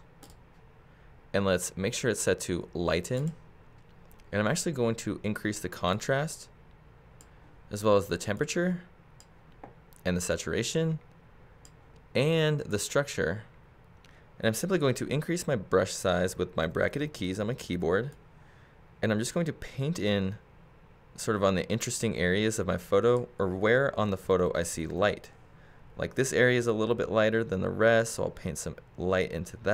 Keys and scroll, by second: 16.3 ], 24.0 [.